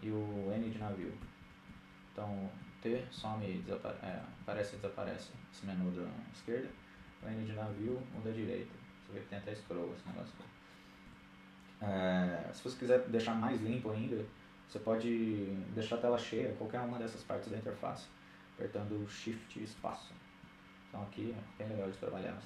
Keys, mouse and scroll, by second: 0.0-4.1 typing, 5.4-6.8 typing, 7.9-10.7 middle drag, 9.7 n, 18.4 shift+space, 20.0-22.4 middle drag, 20.2-21.3 scroll up 1.